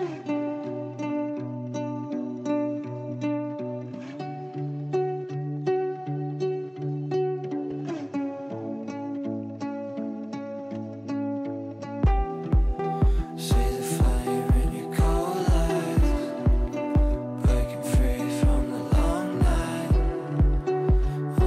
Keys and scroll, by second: 6.9 Delete, 11.8 space, 15.4 g.